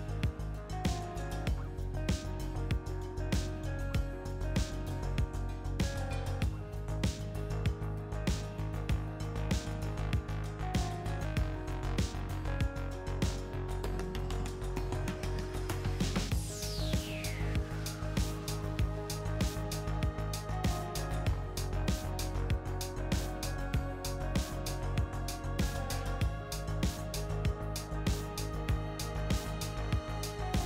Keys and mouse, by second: 1.1 s, 3.6 ctrl+z, 4.1 a, 4.3 a, 4.8 s, 8.6-12.8 middle drag, 13.0-15.6 middle drag, 16.3-20.3 drag, 20.5 e, 24.9 ctrl+r, 26.8 ctrl+r, 28.4-30.6 middle drag.